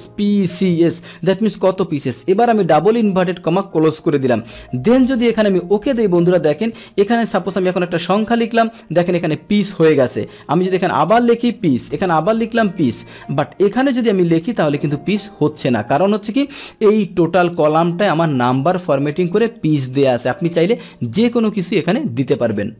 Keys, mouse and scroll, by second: 7.8 right click, 11.1-11.9 scroll down 2, 12.8-13.2 scroll down 1, 14.9 Left, 16.7 Down, 17.6 click, 19.4 click, 19.6 right click, 20.4 click, 21.3 click.